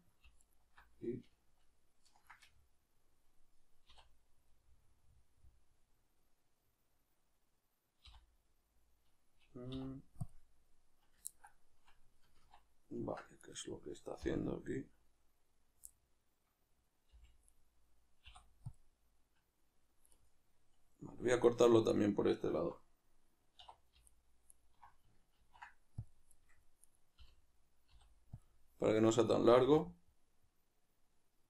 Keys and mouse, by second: 0.4 alt+right click, 2.4-13.4 middle drag, 3.9 a, 8.0 y, 12.4 ctrl+z, 13.4 right click, 14.2 l, 15.9-18.2 middle drag, 17.2 g, 18.2 u, 20.2-21.4 middle drag, 21.4 right click, 21.9 super+right click, 24.0 alt+right click, 24.5 alt+right click, 25.3 ctrl+e, 26.8 right click, 29.4-31.4 middle drag.